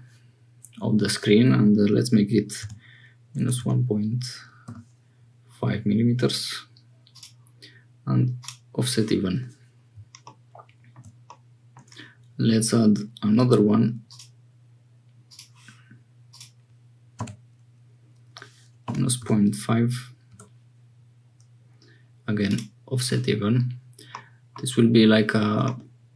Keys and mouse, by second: 8.3 click, 11.3 click, 13.4 alt+e, 16.2 click, 16.4-21.5 middle drag, 22.4 middle click, 24.1 middle click.